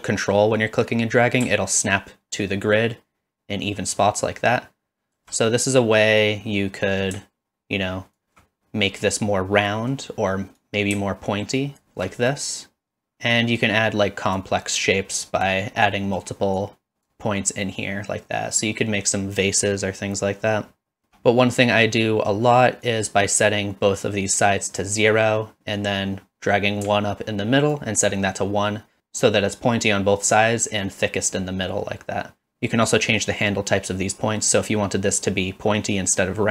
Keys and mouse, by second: 6.2-8.2 drag, 9.0 middle click, 10.6-11.8 drag, 12.3-13.1 middle drag, 13.7 click, 14.9 click, 15.8 click, 16.6 click, 17.6-19.0 middle drag, 21.0 BackSpace, 22.8-24.8 drag, 25.7-27.7 drag.